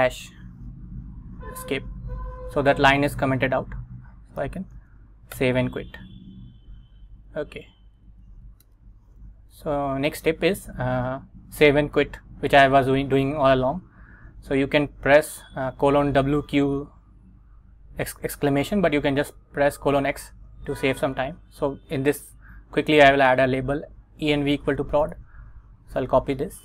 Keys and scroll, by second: 1.6 Escape, 4.5 shift+;, 4.9 x, 5.5 Return, 7.0 super+Tab, 8.1 super+Tab, 8.8 Return, 9.5 Right.